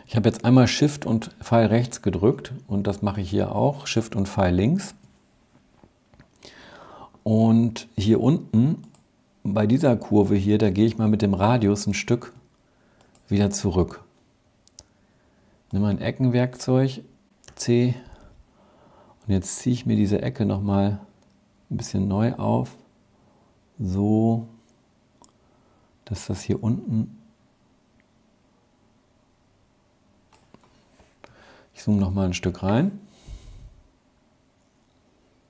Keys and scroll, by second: 4.1 shift+Left, 17.5 c.